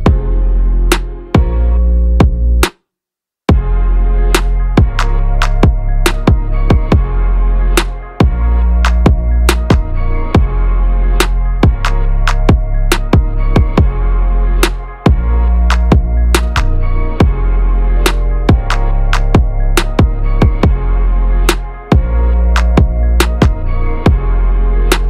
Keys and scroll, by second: 19.5 ctrl+v, 24.2 ctrl+a.